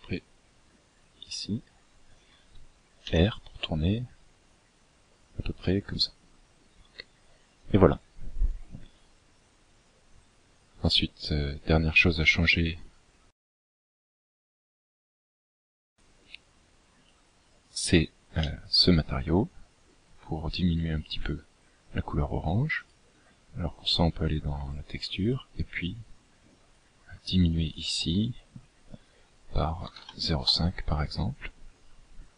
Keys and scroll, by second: 0.8 r.